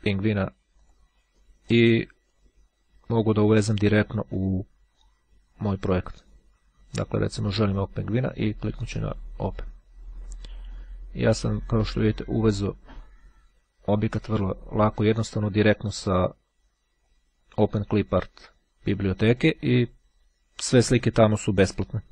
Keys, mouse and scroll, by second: 0.4 click, 2.1 click, 6.2 click, 8.4-10.2 drag, 10.8-12.2 drag, 13.1-14.5 ctrl+drag, 14.6-16.7 ctrl+drag, 17.2-19.9 ctrl+drag.